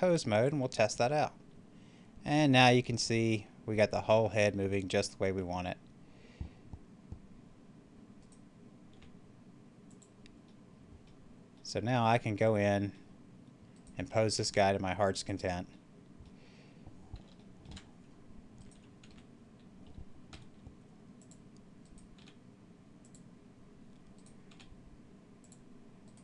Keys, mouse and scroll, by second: 0.9 r, 8.2 right click, 8.9 r, 9.7 click, 10.4 middle click, 10.9 scroll up 1, 11.0 scroll down 1, 11.5 scroll up 1, 13.7 right click, 14.2 r, 15.2 click, 15.6 middle click, 16.7 scroll down 1, 17.3 shift+middle click, 17.8-18.4 scroll up 1, 18.4 right click, 19.0 t, 20.2 r, 21.1 click, 21.7 right click, 22.0 r, 22.9 click, 24.0 right click, 24.4 r, 25.3 click, 25.9 right click.